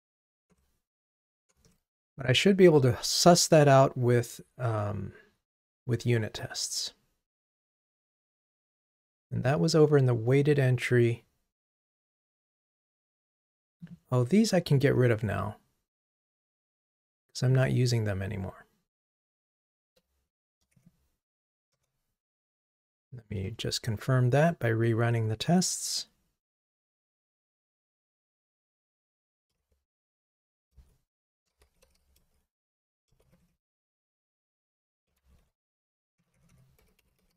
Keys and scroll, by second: 0.5 ctrl+Tab, 20.4 shift+Down, 20.8 Delete, 22.9 ctrl+r, 30.0 super+k.